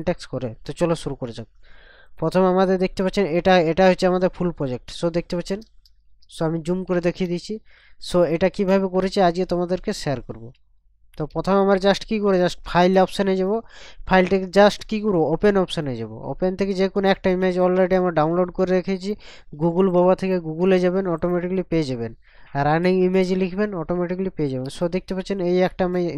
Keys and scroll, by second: 4.9 ctrl+KP_Subtract, 5.6 ctrl+KP_Add, 6.9 ctrl+KP_Subtract, 10.8 ctrl+KP_Subtract, 21.8 ctrl+KP_Add, 24.6 ctrl+KP_Add.